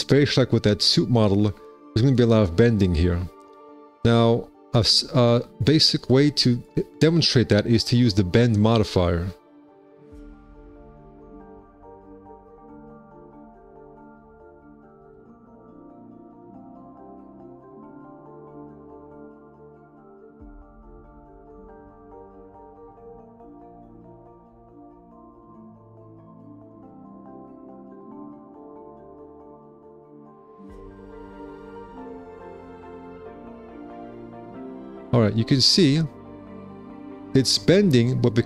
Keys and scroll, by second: 12.2 e, 13.6 b, 28.1 KP_9, 31.8 -, 32.3 KP_9.